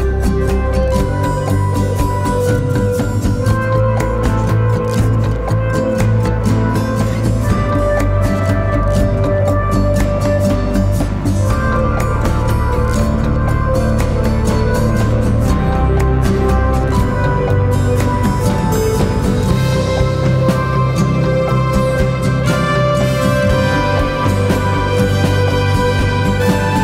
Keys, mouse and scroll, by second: 6.3 double click.